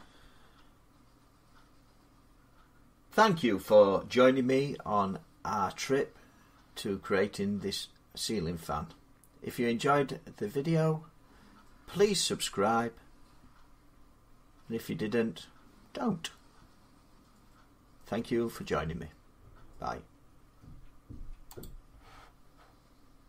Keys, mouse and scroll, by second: 21.4 click.